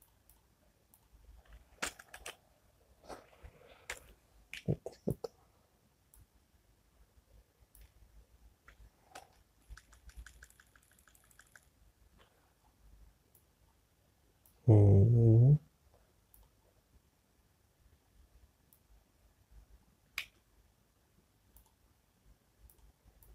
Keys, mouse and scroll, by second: 1.1 click, 5.0 y, 5.9 click, 14.1 click, 19.5 click, 21.9 z, 23.2 click.